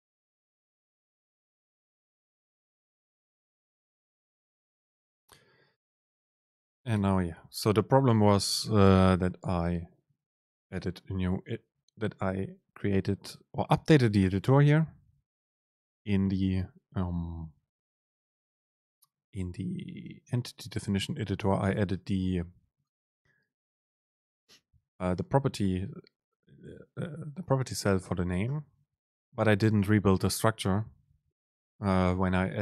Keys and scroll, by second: 11.8 BackSpace.